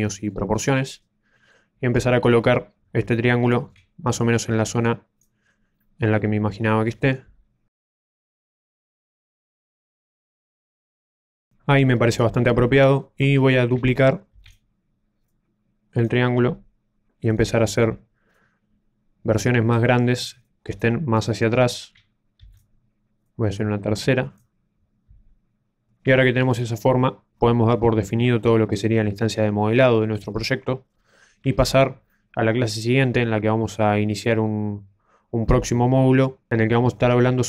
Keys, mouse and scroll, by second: 0.0 shift+middle click, 0.0 scroll up 8, 0.5-1.1 scroll down 3, 0.8 middle click, 2.2 click, 3.4 shift+middle click, 4.1 click, 5.4 scroll down 1, 5.7 middle click, 7.9 click, 8.6 KP_1, 9.0 s, 9.4 click, 10.2 middle click, 10.7 scroll down 3, 10.8 a, 14.2 shift+d, 15.2 click, 18.2 click, 22.3 shift+d, 23.1 click, 25.2 click, 25.8 middle click, 25.8 a, 26.4 scroll up 4, 26.6 shift+middle click, 26.6 middle click, 28.5 middle click.